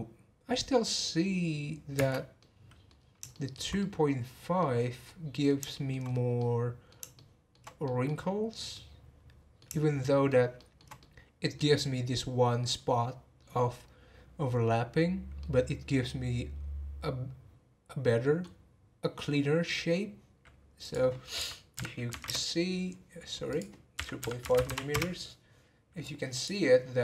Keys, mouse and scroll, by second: 1.9 space, 2.3-3.0 middle drag, 3.0-3.3 scroll down 1, 3.3-4.7 shift+middle drag, 4.7-5.0 scroll down 2, 5.0-6.1 middle drag, 6.1 scroll up 2, 6.4-14.2 middle drag, 15.4-18.4 middle drag, 20.8-24.6 drag, 24.6 m, 26.0-26.8 drag, 26.8 scroll down 2.